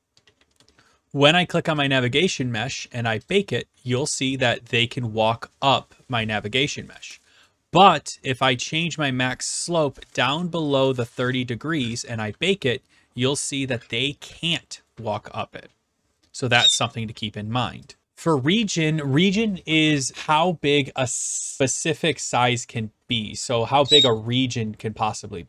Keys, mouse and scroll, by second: 0.0-0.9 typing, 0.6 middle click, 1.3 click, 1.8 click, 3.3 click, 3.9-5.4 d, 5.4 right click, 10.9 click, 12.0 click, 12.7-14.3 typing, 13.8 right click, 14.5 right click, 15.3 right click, 17.9 click, 18.0 right click, 18.0 typing, 22.4-23.4 right drag, 24.0 s, 24.1-25.2 right drag.